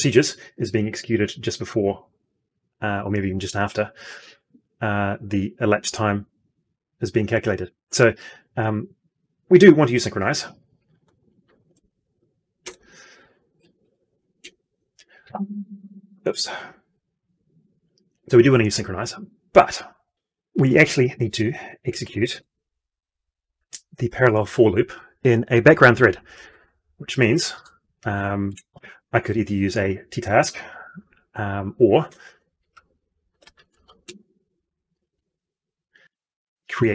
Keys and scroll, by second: 11.7 ctrl+space, 14.9 F12.